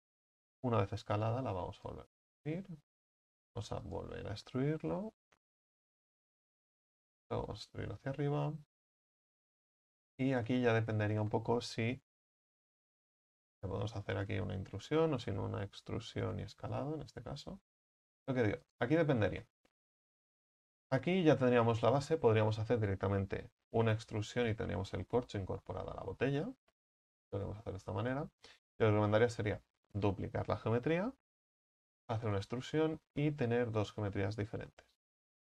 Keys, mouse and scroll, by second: 0.5-1.1 shift+middle drag, 1.1 e, 2.0-3.3 drag, 3.3-3.7 scroll up 4, 3.7 e, 5.0 s, 7.1 e, 8.1-9.8 drag, 9.8 middle click, 10.5 z, 10.8-12.2 scroll up 2, 12.2 i, 15.9 e, 16.4 s, 19.3 middle click, 20.2 z, 20.8 z, 21.8-23.8 middle drag, 23.8 e, 24.6-25.9 drag, 25.9-27.1 middle drag, 27.1 ctrl+z, 27.3 ctrl+z, 28.2 middle click, 29.1 shift+d, 30.4-31.5 middle drag, 31.5 e, 32.2-34.8 drag, 34.8 s.